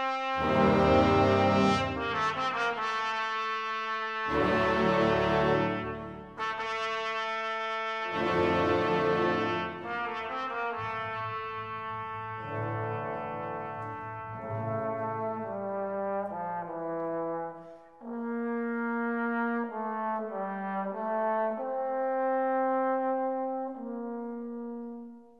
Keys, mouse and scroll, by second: 0.5 click, 0.8 scroll up 1, 0.9 click, 1.4 scroll down 1, 1.5 click, 1.8 right click, 1.9 click, 2.0 right click, 2.1 click, 2.2 right click, 2.4 click, 2.5 Return, 2.6 g, 2.7 Return, 2.8 click, 3.0 click, 3.8 Return, 3.8 click, 4.0-5.9 typing, 4.1 click, 4.3 Return, 4.4 alt+click, 5.2 click, 5.3 shift+right click, 5.6 shift+right click, 5.8 click, 6.0 alt+Return, 6.0 alt+click, 6.8 right click, 6.9 click, 7.0 scroll up 1, 7.0 shift+click, 7.2 click, 7.5 alt+click, 7.7-8.9 typing, 8.0 click, 8.7 click, 8.9 Return, 9.0 right click, 9.0 click, 9.4 alt+click, 9.8 right click, 10.4 click, 10.9 shift+right click, 11.1 click, 11.4 right click, 11.4 click, 11.6 Delete, 11.7 alt+click, 12.4 shift+right click, 12.5 click, 12.6 scroll down 1, 12.7 shift+click, 12.9 shift+right click, 13.0 alt+click, 13.2 middle click, 13.3-17.4 typing, 13.4 click, 13.6 alt+click, 13.7 right click, 13.8 shift+click, 14.0 alt+scroll up 1, 14.3 alt+middle click, 14.4 click, 14.7 alt+click, 15.2 right click, 15.3 click, 15.6 alt+click, 15.6 right click, 15.8 alt+click, 16.4 click, 16.6 right click, 16.7 alt+click, 17.0 alt+scroll down 1, 17.1 click, 17.4 middle click, 17.5 click, 17.8 click, 18.4 alt+scroll up 1, 18.6 ctrl+click, 19.0 alt+middle click, 19.1 space, 19.2 alt+click, 20.1 right click, 20.2 alt+click, 20.3 shift+right click, 20.4 click, 21.8 scroll up 1, 22.0 middle click, 22.0 right click, 22.1 click, 22.2 click, 22.6 click, 22.8-24.8 typing, 22.8 click, 23.1 middle click, 23.2 click, 23.4 click, 23.8 click, 23.9 right click, 23.9 scroll up 1, 24.2 right click, 24.2 click, 24.4 click, 24.5 scroll down 1, 24.7-25.1 scroll up 2, 24.9 right click, 25.1 click, 25.3 click.